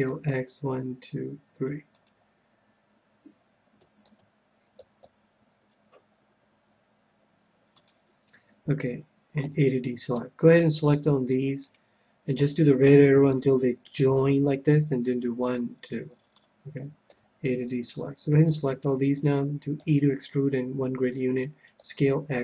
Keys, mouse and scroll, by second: 1.1 s, 2.0-3.8 drag, 4.0 ctrl+z, 4.7 s, 7.8-9.7 drag, 9.4 a, 10.5 c, 11.6-13.4 right drag, 12.5-14.1 drag, 17.1 a, 17.4 c, 18.8-20.6 right drag, 19.8 e, 21.0-22.4 drag, 21.8 s.